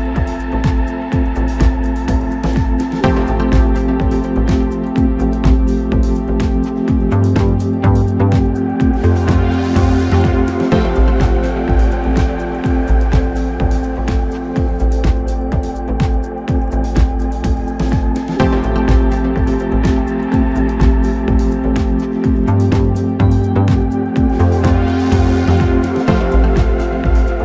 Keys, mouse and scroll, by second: 0.9 KP_Divide, 1.6 scroll down 3, 2.0-3.0 middle drag, 3.0 KP_1, 3.5 s, 7.6 Tab, 8.0 middle click, 8.5 scroll up 1, 8.9 3, 9.6 click, 10.7 KP_1, 11.2 g, 14.4-15.6 middle drag, 15.6 click, 16.5 KP_1, 17.6 s, 20.7 Tab, 22.1 ctrl+a, 24.0-24.4 scroll up 2, 24.4-25.2 middle drag, 25.2 Tab, 25.6-26.8 scroll up 4, 26.8 2.